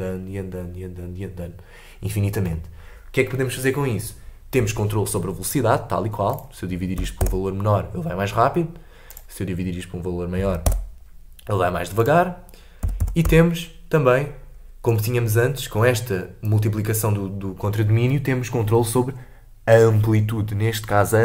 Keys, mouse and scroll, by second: 6.9-15.5 drag, 15.5 middle click, 15.8-16.1 scroll up 3, 16.1 middle click, 17.0-20.1 drag.